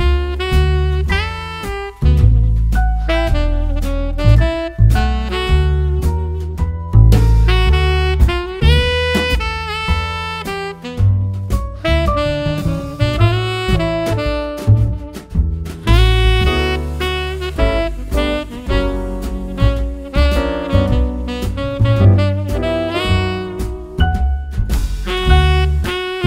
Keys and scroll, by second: 3.0 2, 3.2 Return, 5.0 super+d, 17.6 super+d.